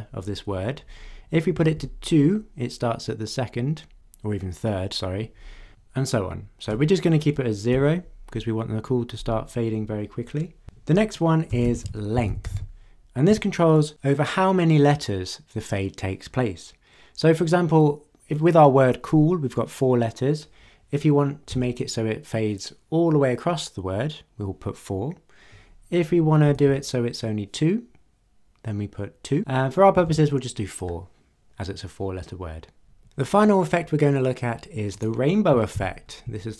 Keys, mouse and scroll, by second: 1.5 BackSpace, 1.7 2, 6.7 BackSpace, 7.7 0, 11.4-13.3 typing, 21.5 4, 26.5 BackSpace, 26.7 2, 29.9 BackSpace, 30.0 4, 34.9 click, 35.8 ctrl+d.